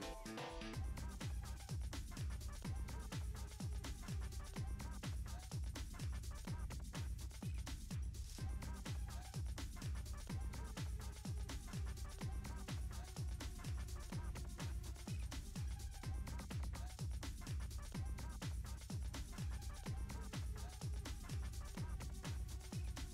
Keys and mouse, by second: 1.2 middle drag, 1.7 click, 1.9 shift+middle click, 2.5-2.8 middle drag, 3.0 middle click, 3.5 shift+middle click, 3.9 KP_0, 5.7 drag, 6.2-7.5 drag, 9.6-11.1 drag, 13.7 click, 15.1 ctrl+middle click, 15.7 ctrl+middle click, 16.7 ctrl+s, 17.4 shift+a, 18.8 g, 19.4 KP_3, 19.7 r, 20.9 g, 22.0-23.1 drag.